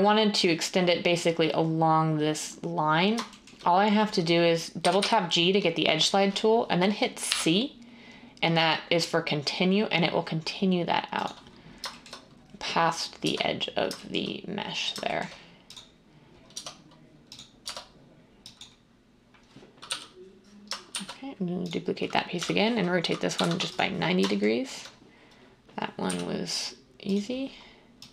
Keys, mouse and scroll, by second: 4.7 g, 4.9 g, 7.2 c, 13.2 Tab, 16.5 Tab, 17.6 Tab, 19.8 l, 20.9 d, 22.3-23.6 typing, 26.1 g.